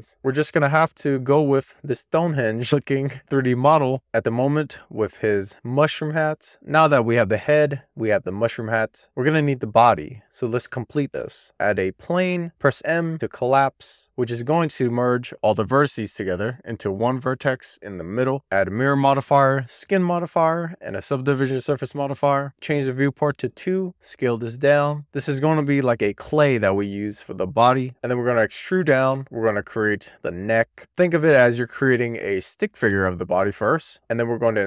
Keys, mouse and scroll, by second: 0.0-0.5 scroll down 1, 1.0 shift+middle click, 2.1-5.9 scroll up 2, 6.4-7.6 scroll up 1, 10.5 click, 11.1 click, 11.5 shift+a, 12.3 Tab, 12.4 a, 12.9 m, 20.5 click, 21.9 click, 23.4 click, 23.8 r, 25.0 click, 27.4-28.1 scroll up 3, 27.7 Tab, 28.1 d, 29.8 z, 33.3 click.